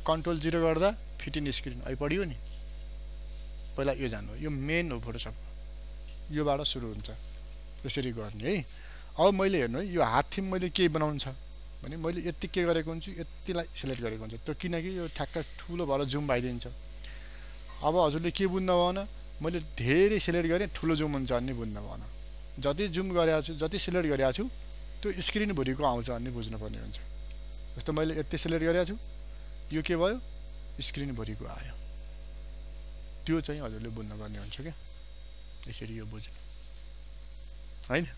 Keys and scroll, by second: 12.0 ctrl+space, 18.2 ctrl+0, 19.3 ctrl+space, 22.9 ctrl+0, 27.5 ctrl+space.